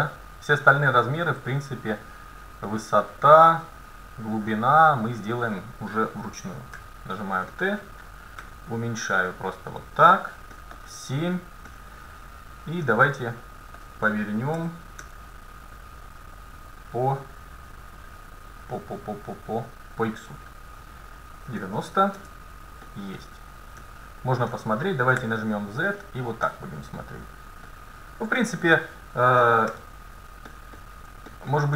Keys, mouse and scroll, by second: 0.0 middle click, 6.8 t, 7.6-9.5 middle drag, 8.5 s, 10.6 middle click, 10.9 KP_7, 14.6 r, 14.7-16.2 middle drag, 22.9-23.3 scroll up 1, 23.3-24.8 middle drag, 23.8 KP_1, 25.2 z, 28.4 KP_9, 29.7 KP_7.